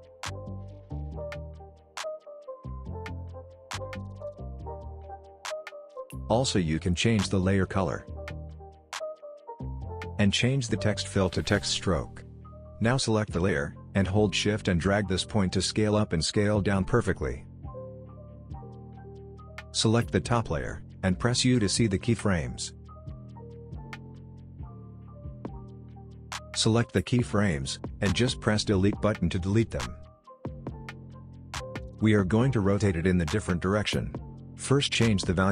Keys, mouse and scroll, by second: 2.8-4.6 typing, 5.2 click, 5.9 right click, 7.0 click, 10.7-17.1 drag, 17.4 click, 17.6 scroll up 1, 18.4-20.6 drag, 21.8 u, 27.2 click, 35.1-35.5 drag.